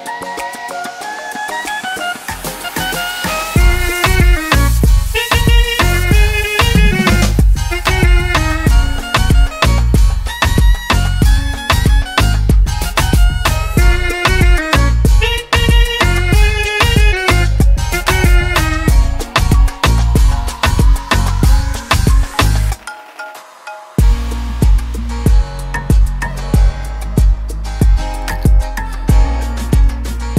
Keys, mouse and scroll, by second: 0.3 click, 3.8 click, 4.3 right click, 6.1 typing, 12.9 click, 14.9 click, 19.6 click, 20.7 click, 27.3 click.